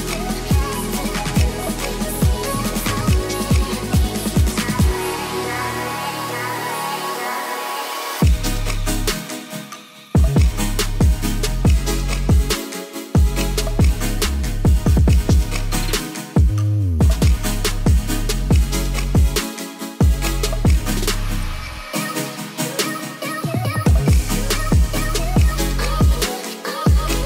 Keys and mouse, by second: 2.5 s, 12.2 click, 12.3 Tab, 12.5-13.2 drag, 13.3 shift+click, 13.5-14.3 drag, 14.4 shift+click, 14.7-15.1 drag, 15.2 Tab, 15.4 Tab, 15.6 click, 15.9 ctrl+s, 17.9-27.2 drag.